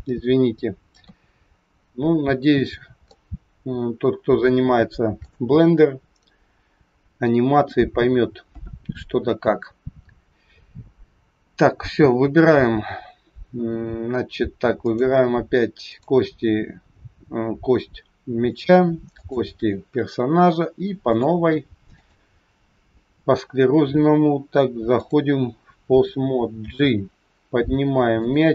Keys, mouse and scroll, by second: 0.9 KP_3, 1.8-2.2 scroll down 5, 3.0 shift+middle click, 14.8 click, 15.8 click, 19.1 shift+click, 21.0 click, 24.9 click, 26.7 g.